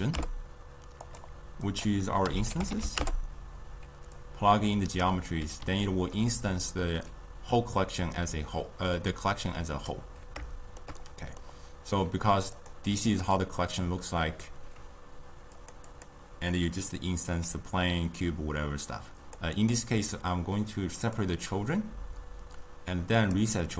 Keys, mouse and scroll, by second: 1.7-5.9 drag, 5.9-10.0 ctrl+middle drag, 10.0 click, 10.5-12.6 shift+middle drag, 12.6 click, 13.1 click, 15.6 click, 15.9 click, 19.3 click, 19.7 click, 21.1-23.4 drag.